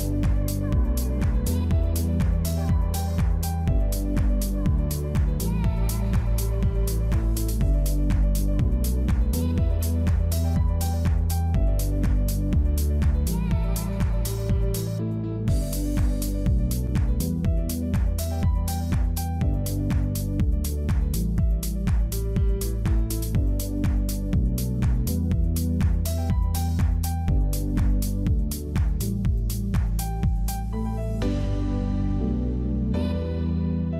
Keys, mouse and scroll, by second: 1.1 scroll up 1, 1.3 Tab, 1.4 middle click, 3.8 middle click, 4.4 click, 4.6 click, 5.1 middle click, 5.7 click, 6.8 middle click, 7.2 KP_1, 7.7 shift+middle click, 8.4 click, 9.1 middle click, 9.4-10.0 scroll up 1, 10.0 click, 10.2 middle click, 10.4 scroll down 1, 10.5 middle click, 11.5 click, 12.1 click, 12.3 scroll up 1, 12.5 middle click, 13.6 alt+click, 14.4 alt+shift+click, 15.2 alt+click, 16.2 alt+shift+click, 16.5 shift+click, 16.9 middle click, 17.9 alt+shift+s, 19.7 Tab, 19.8 middle click, 20.4 Tab, 20.5 middle click, 21.9 ctrl+z, 22.1 ctrl+z, 22.2 ctrl+z, 22.5 middle click, 23.5 shift+click, 23.7 shift+click, 24.0 shift+click, 24.2 shift+click, 24.4 shift+click, 25.0 shift+click, 25.3 shift+click, 25.8 shift+click, 26.2 shift+click, 27.1 scroll up 1, 27.3 shift+middle click, 27.7 shift+click, 28.1 middle click, 28.8 middle click, 29.1 middle click, 30.0 shift+click, 30.4 shift+click, 30.7 middle click, 31.2 shift+click, 31.5 middle click, 31.8 middle click, 32.5 alt+s, 33.5 alt+shift+s.